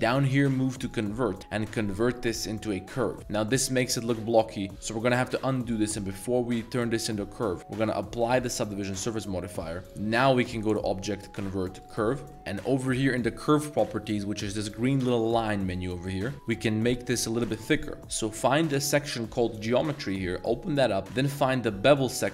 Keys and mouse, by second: 4.0 Tab, 4.6 Tab, 7.8-8.5 drag, 10.0-11.9 drag, 12.3-14.0 middle drag, 14.0 click, 14.0 z, 19.7 click.